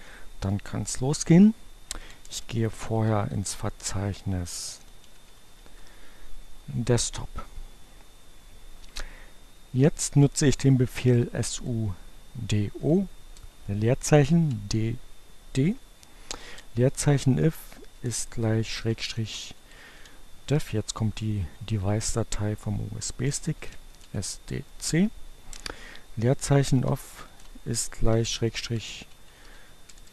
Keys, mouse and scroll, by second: 1.5-5.4 typing, 9.7-10.7 typing, 12.1 o, 12.5 space, 14.3 d, 15.0 space, 16.8-20.4 typing, 22.2-23.2 typing, 24.8-25.7 typing, 27.4-29.9 typing.